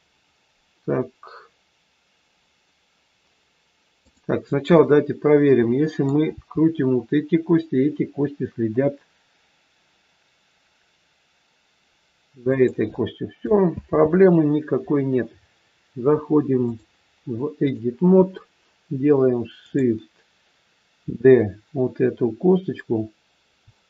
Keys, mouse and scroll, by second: 4.0 click, 4.7 middle click, 6.4 r, 13.7 ctrl+z, 16.6 click, 19.6 click, 23.6 click.